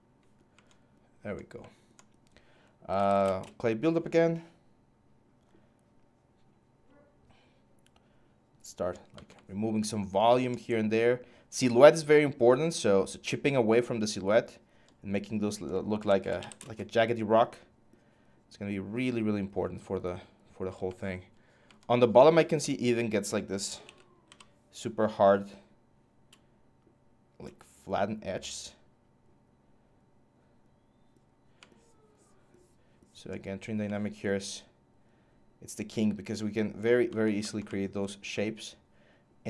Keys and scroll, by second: 2.4-3.2 typing, 15.5-16.6 typing, 23.6-24.0 typing.